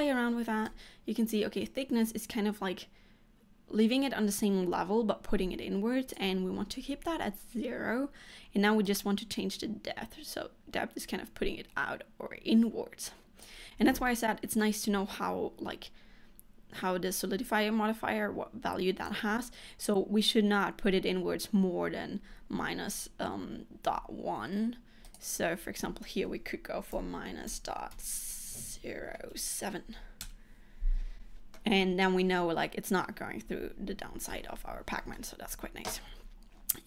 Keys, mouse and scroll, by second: 0.7 click, 8.9 click, 13.9 scroll down 2, 14.1 middle click, 25.1 click, 31.6 middle click, 34.4 middle click, 35.5 scroll up 2.